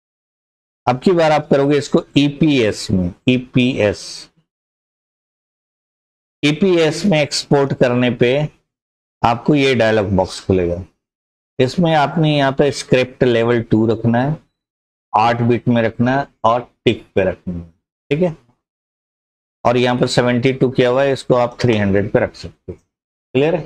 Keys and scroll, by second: 20.7-22.0 typing.